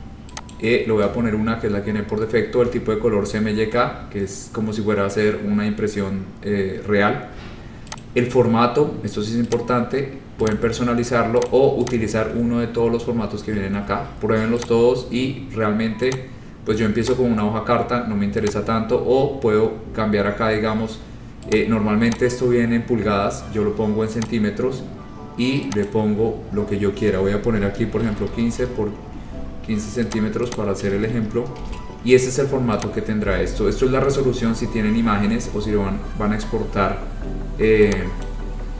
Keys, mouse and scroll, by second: 0.6 click, 8.1 click, 9.7 click, 10.6 click, 11.6 click, 12.0 click, 12.5-14.4 scroll, 14.8 click, 16.2 click, 17.3 click, 18.6 click, 21.7 click, 22.4 click, 24.4 click, 26.0 click, 27.8-28.9 typing, 30.2 click, 30.7 click, 31.0 ctrl+a, 31.5-32.2 typing, 33.0 click, 38.4 click.